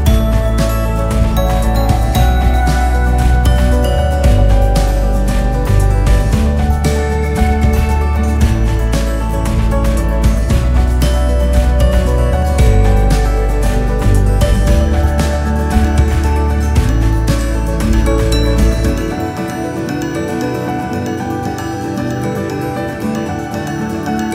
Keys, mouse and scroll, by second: 3.2 click, 4.7 shift+d, 10.1 r, 13.4 g, 17.8 click, 18.0-18.6 scroll down 6, 18.6 scroll up 2, 19.2-19.6 scroll up 4, 19.6-20.5 scroll down 1, 20.5 shift+a, 23.4 s.